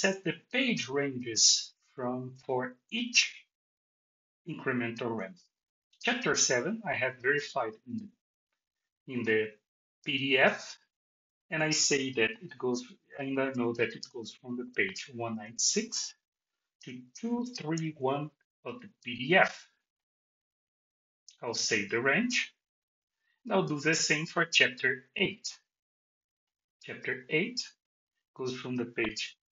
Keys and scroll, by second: 15.3 Tab.